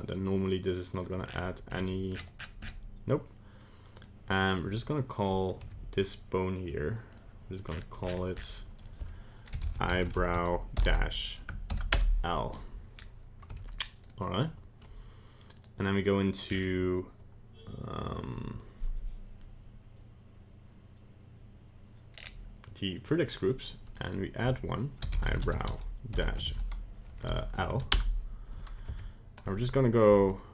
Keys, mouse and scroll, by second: 0.0 right click, 0.9 click, 1.2-3.6 scroll down 30, 3.9 right click, 5.7 Tab, 6.0 right click, 7.1 click, 7.6-9.0 scroll up 25, 8.8 click, 12.9 scroll up 2, 13.5 Tab, 14.0 right click, 15.5 click, 16.4-17.7 scroll down 6, 22.1-23.0 scroll down 4, 23.0 click, 24.0 click, 24.1 click, 28.9 Tab, 29.4 middle click, 30.3 alt+right click.